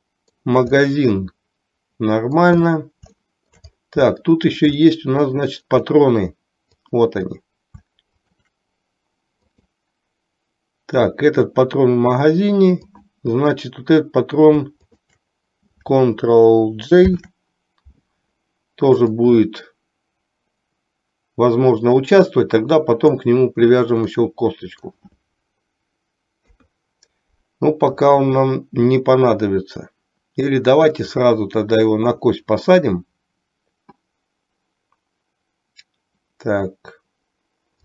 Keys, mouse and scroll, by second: 0.1-0.6 shift+middle drag, 1.0-2.6 middle drag, 3.4 shift+middle click, 4.4-4.8 shift+middle drag, 5.0-5.8 middle drag, 7.0 click, 9.6 click, 13.0 click, 14.9-15.3 shift+drag, 17.1 ctrl+j, 19.5-23.4 drag, 24.4 middle click, 26.5 KP_3, 31.3-32.5 drag.